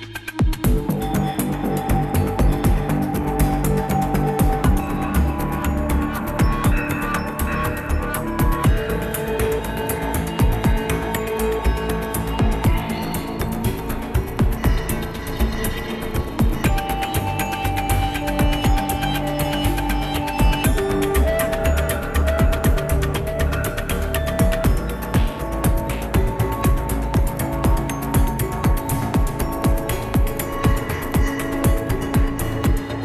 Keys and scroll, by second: 1.2 ctrl+alt+shift+-, 1.3 ctrl+alt+shift+-, 1.4 ctrl+alt+shift+-, 1.5 ctrl+alt+shift+-, 18.1 ctrl+shift+s, 31.6 c.